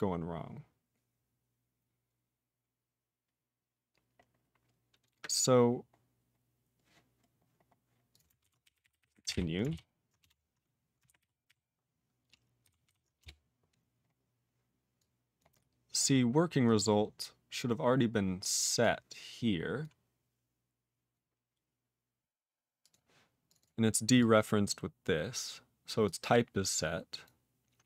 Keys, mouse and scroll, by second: 2.1-2.9 scroll down 1, 3.0-4.2 scroll down 1, 4.2-5.7 scroll up 27, 6.3-6.8 scroll up 2, 7.2-7.7 scroll up 5, 7.9 scroll down 13, 8.0 click, 8.1 click, 8.3-9.8 typing, 10.1 Return, 11.0 ctrl+r, 11.4 ctrl+r, 12.6 ctrl+s, 12.8 ctrl+s, 13.1 Return, 14.0-14.9 scroll up 2, 14.9 click, 15.3 click, 15.5-16.3 scroll up 3, 16.6 click, 16.7 click, 17.4-18.1 scroll up 3, 18.7 click, 19.7 click, 22.7 click, 22.8 click, 23.4 click, 23.5 click, 23.5 double click, 23.6 double click, 24.1 click, 24.6 click, 26.0 click, 27.2 click, 27.8 click.